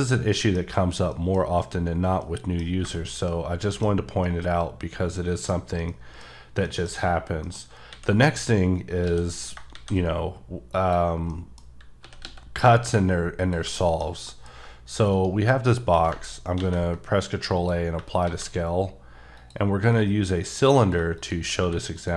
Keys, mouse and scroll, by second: 0.1 scroll down 3, 0.3 middle click, 1.1 middle click, 2.4 middle click, 2.7 scroll down 2, 2.9 shift+middle click, 4.4 middle click, 5.9 middle click, 6.9 middle click, 7.6 scroll up 1, 7.9 a, 8.2-9.0 scroll down 2, 9.0 x, 9.3 click, 9.7 shift+a, 10.7 click, 11.2 scroll up 1, 11.3 middle click, 11.7 scroll, 12.0 s, 12.2 x, 12.8 y, 13.4 click, 13.7 shift+middle click, 15.1 shift+right click, 16.5 ctrl+a, 17.5 click, 18.2 a, 19.3 click, 19.8 s, 20.8 click, 21.2 shift+click, 21.6 q, 21.9 click.